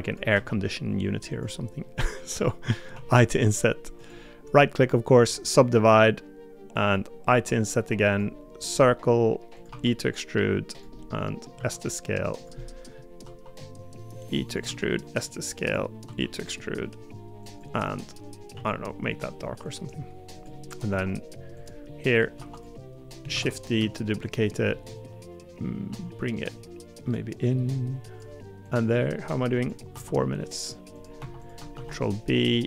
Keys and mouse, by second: 0.3 e, 2.0 middle click, 2.9 i, 9.7 e, 11.0 middle click, 11.5 s, 12.6 middle click, 13.2 e, 14.6 s, 16.0 e, 18.5 g, 20.8 2, 22.4 3, 23.3 shift+d, 23.7 s, 24.7 middle click, 25.9 g, 31.2 2, 31.7 ctrl+b.